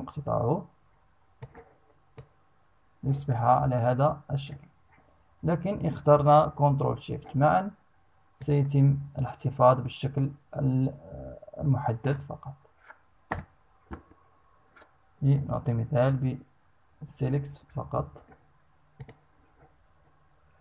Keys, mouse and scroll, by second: 0.9 click, 7.9-11.8 ctrl+shift+drag, 12.9 Return, 15.3 ctrl+z, 16.6 ctrl+e, 16.7 ctrl+z, 18.5 click.